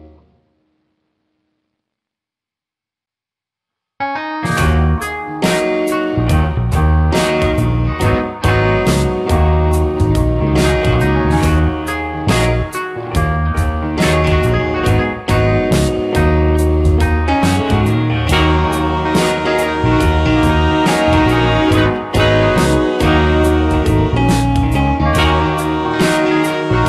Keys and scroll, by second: 1.4 space, 13.1 space, 14.6 space, 19.6 space, 21.2 space.